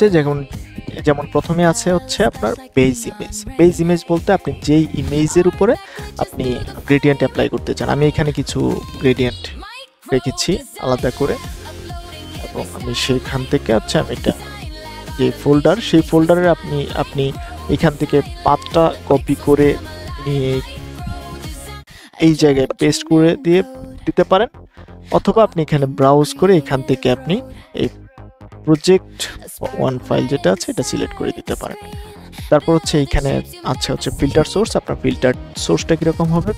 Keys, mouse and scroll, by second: 18.6 ctrl+c, 19.4 click, 22.2 ctrl+v, 23.8-36.5 drag.